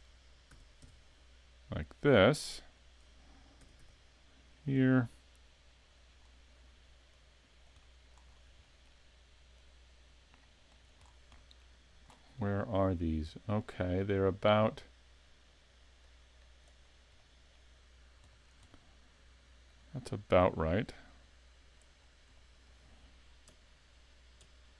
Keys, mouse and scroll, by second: 0.5 s, 3.0 click, 3.6 s, 4.7 click, 5.3 click, 6.2 scroll down 3, 7.1 click, 7.8 middle click, 8.3 scroll up 4, 8.6 shift+middle click, 9.6 click, 11.0-11.4 scroll down 2, 11.4 middle click, 12.1-13.0 scroll down 11, 13.6 middle click, 16.0 click, 16.8-17.1 scroll up 4, 17.2 middle click, 17.9 scroll down 2, 18.3 shift+middle click, 18.7 middle click, 20.9 click, 22.0 scroll up 3, 22.4 shift+middle click, 23.7 KP_3, 24.4 KP_1.